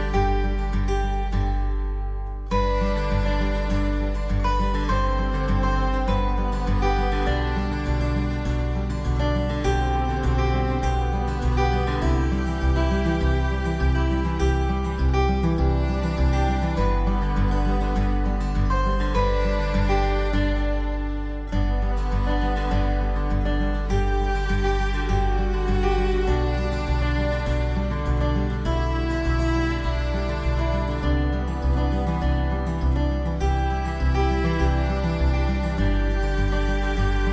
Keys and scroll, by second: 10.9 alt+space.